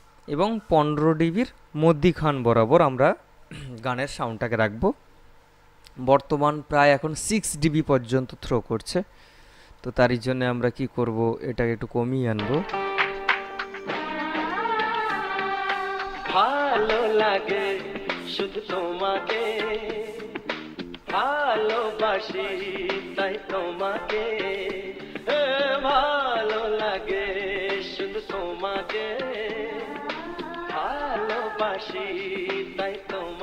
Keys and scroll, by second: 12.6 space.